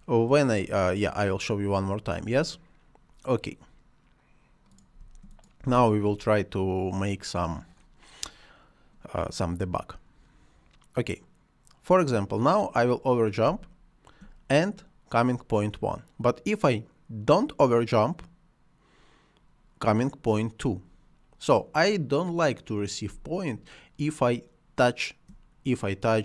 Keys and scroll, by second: 5.0 space, 13.4 space.